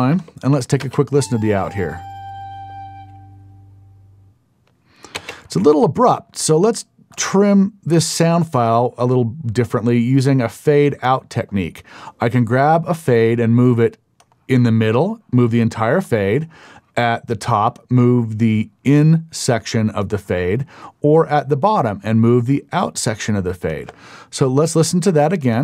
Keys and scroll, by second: 0.8 space, 5.1 space, 24.5 Up.